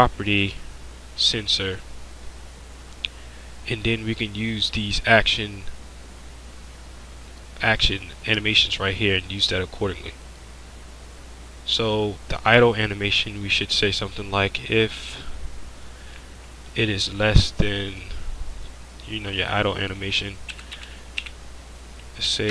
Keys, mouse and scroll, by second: 2.2-12.9 drag, 18.5-22.5 drag.